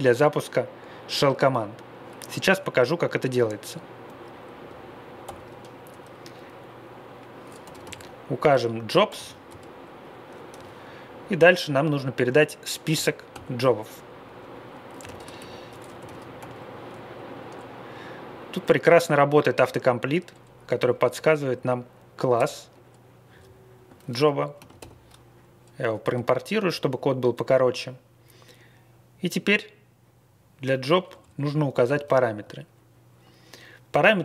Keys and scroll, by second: 5.2 shift+;, 7.3-9.4 typing, 12.9 shift+9, 13.3 shift+9, 14.7-16.4 typing, 22.3 Return, 23.3 Left, 24.5 ctrl+c, 24.7 typing, 26.0 space, 31.2 Left, 31.3 Left, 32.0 alt+., 34.1 Down.